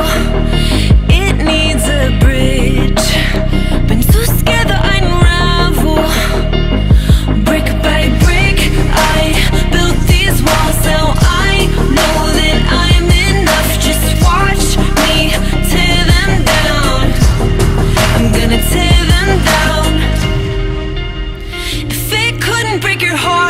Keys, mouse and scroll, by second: 1.8 click, 3.1 alt+click, 4.7 click, 5.3 alt+click, 5.7 Tab, 5.8 alt+click, 7.1 click, 7.3 click, 7.9 click, 10.1 drag, 10.8-11.3 drag, 11.3 alt+middle drag, 11.4-13.4 alt+drag, 14.2 Delete, 14.7 shift+a, 15.5 click, 15.9 drag, 19.2-21.5 alt+drag, 21.7 alt+click, 23.2 click.